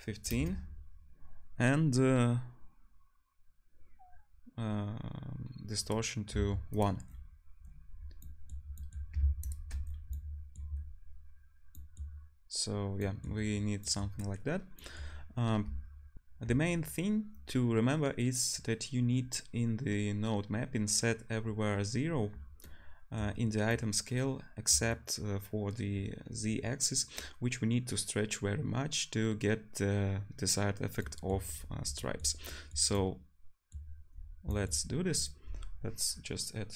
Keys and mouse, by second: 6.9-7.8 drag, 7.8-9.0 middle drag, 9.0 drag, 9.2 ctrl+shift+middle drag, 9.5 ctrl+shift+drag, 9.7 middle click, 10.0 click, 10.3 middle click, 10.7-13.3 drag, 35.2-36.7 drag.